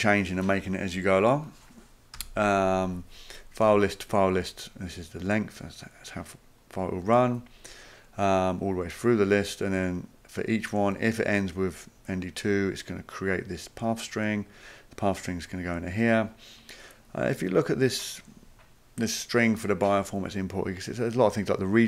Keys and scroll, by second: 2.2 ;.